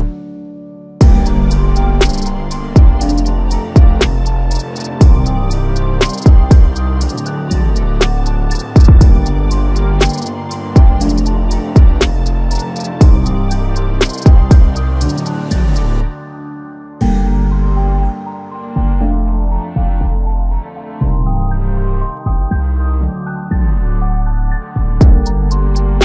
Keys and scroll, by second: 1.1 ctrl+shift+g, 1.2 t, 4.0-4.5 typing, 7.3 ctrl+t, 24.2 ctrl+d, 25.1 ctrl+t.